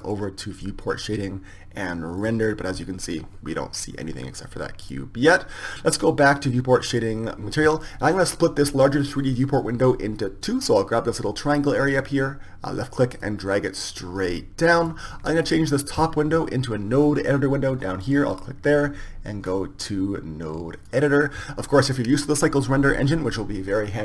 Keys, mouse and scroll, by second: 1.2 click, 4.9 click, 6.5 click, 13.6-15.4 drag, 18.3-24.0 drag.